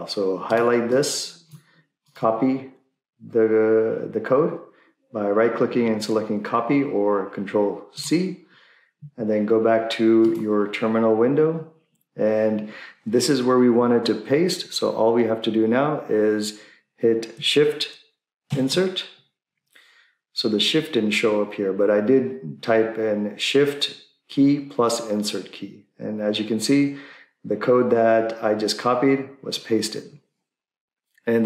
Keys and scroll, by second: 18.5 Insert.